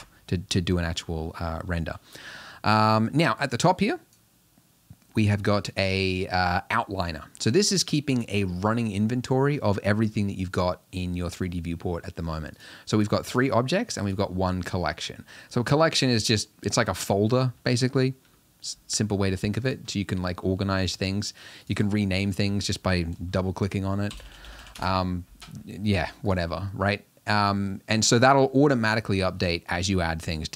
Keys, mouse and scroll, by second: 6.9 click, 12.6 click, 13.0 click, 13.4 click, 14.1 click, 19.7 click, 21.7-24.7 drag, 24.7 l, 28.1 click.